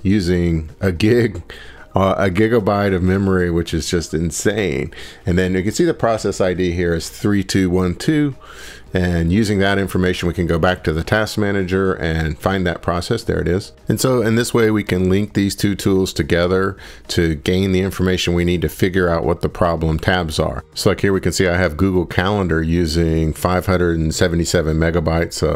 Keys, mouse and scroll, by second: 4.2 click, 9.2 drag, 15.2 click, 20.0 click.